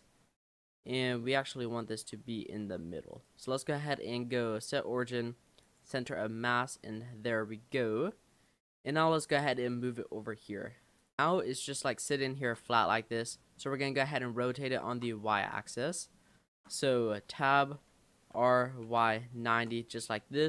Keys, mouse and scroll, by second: 1.6-2.7 right drag, 2.7 Tab, 3.1-6.7 right drag, 6.7 Tab, 6.9 Tab, 7.8 click, 9.1 click, 11.0 click, 11.7-12.0 scroll down 3, 12.3 shift+middle click, 13.3-13.6 scroll down 3, 13.6-15.8 middle drag, 15.8 scroll up 1, 15.9-17.3 middle drag, 17.3 Tab, 18.4 r, 20.2 middle click.